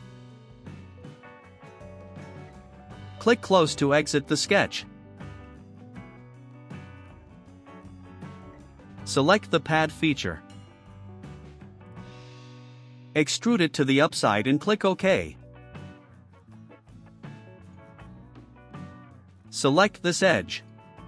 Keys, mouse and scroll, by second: 0.1 3, 1.1 Return, 7.0 click, 11.1 click, 13.0 8, 13.6 5, 14.7 click, 17.5 click, 19.3-20.4 drag, 20.7 middle click.